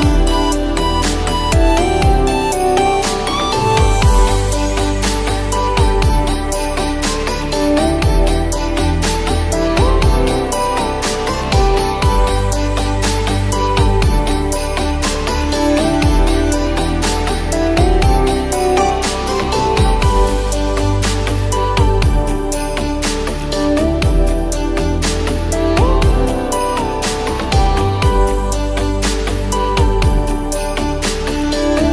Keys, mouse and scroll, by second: 1.1-4.3 drag, 5.4 click, 6.6-7.8 drag, 7.9-9.3 drag, 9.4-13.0 drag, 13.2-14.4 drag, 15.2-20.4 drag, 21.8-23.5 drag, 25.5-30.7 drag.